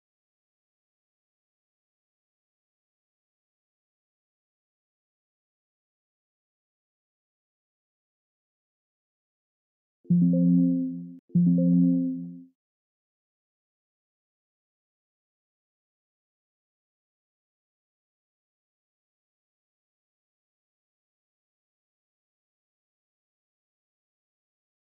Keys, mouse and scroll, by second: 0.0 click, 2.3 click, 4.7 click, 6.6 click, 8.4 click, 9.6 click, 11.6 click, 15.2 click, 16.5 click, 18.3 scroll, 18.8 right click, 19.8 click, 20.9 scroll, 22.7 click, 23.2 scroll, 23.7 right click, 24.2 right click, 24.5 click.